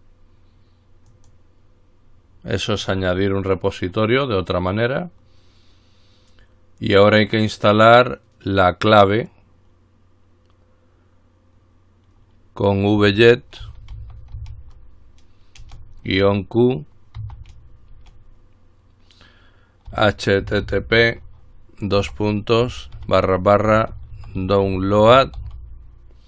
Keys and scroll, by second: 13.2 typing, 14.3-15.1 typing, 16.3 typing, 17.4 typing, 19.9-26.2 typing.